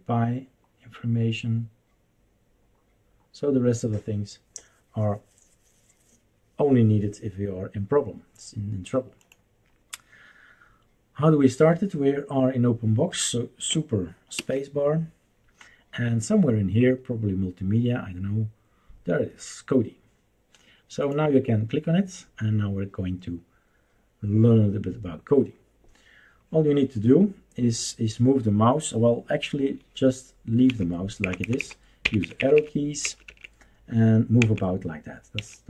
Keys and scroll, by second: 14.6 super+space, 30.7 Down, 31.2 Down, 31.4 Down, 31.6 Down, 32.0 Up, 32.2 Up, 32.3 Up, 32.5 Up, 33.0 Up, 33.4 Up, 34.4 Down, 35.3 Right.